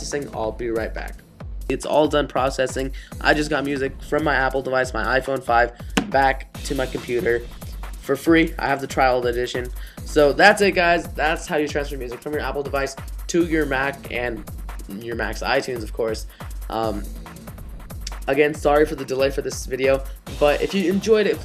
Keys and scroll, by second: 8.8 super+h.